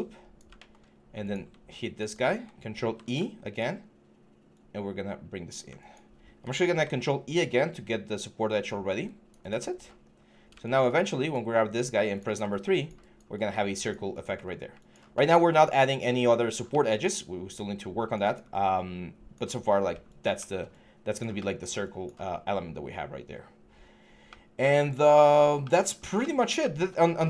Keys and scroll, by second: 2.6 ctrl+e, 6.4 ctrl+e, 9.8 3, 11.4 3, 14.2 1.